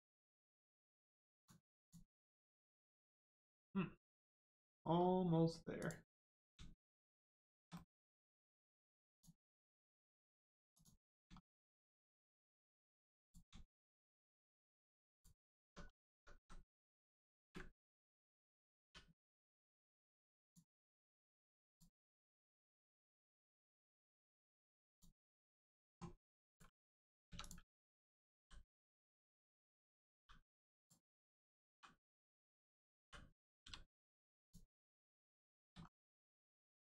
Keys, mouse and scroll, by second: 1.3 click, 2.1 scroll down 1, 2.3 middle click, 4.2 scroll up 1, 4.6 middle click, 5.7 click, 6.0 middle click, 7.3 shift+middle click, 7.7 middle click, 7.8 middle click, 9.0 shift+click, 9.5 right click, 10.7 click, 11.1 scroll down 1, 11.3 shift+middle click, 11.7 middle click, 11.7 middle click, 12.1 scroll up 1, 12.5 shift+middle click, 13.1 click, 13.2 click, 14.0 shift+click, 14.5 right click, 15.1 click, 15.4 scroll down 1, 15.6 Tab, 15.9 middle click, 16.1 Tab, 16.3 a, 16.7 scroll down 1, 16.8 middle click, 17.3 ctrl+space, 20.3 click, 21.0 scroll up 1, 21.7 click, 22.7 middle click, 23.4 Tab, 24.0 click, 24.5 shift+middle click, 24.8 middle click, 24.9 click, 27.2 3, 27.3 click, 28.3 l, 28.7 scroll down 1, 30.1 g, 30.7 click, 32.1 right click, 34.3 click, 34.8 middle click, 35.4 shift+middle click, 35.7 scroll up 1, 36.2 shift+middle click.